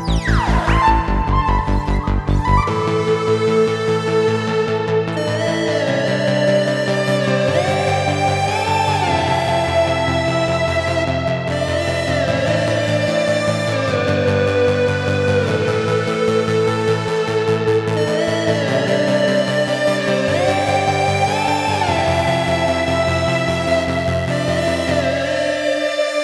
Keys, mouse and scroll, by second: 1.1-3.8 drag, 3.8 Tab, 6.4 click, 8.9 click, 10.1 e, 19.1-26.0 ctrl+middle drag, 26.0 e.